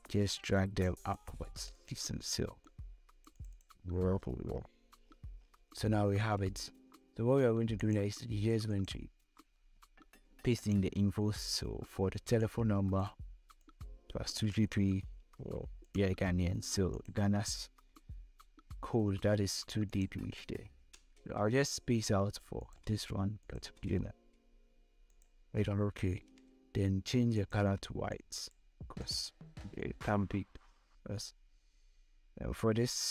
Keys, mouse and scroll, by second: 3.7 scroll down 1, 4.5 scroll up 1, 5.4-5.7 scroll down 2, 7.3-14.6 drag, 14.6 ctrl+c, 15.3 click, 18.0 ctrl+v, 19.3 click, 20.3 space, 22.1 click, 22.4 space, 22.9 click, 23.3 space, 24.5 click, 25.5 v, 26.8-33.1 drag.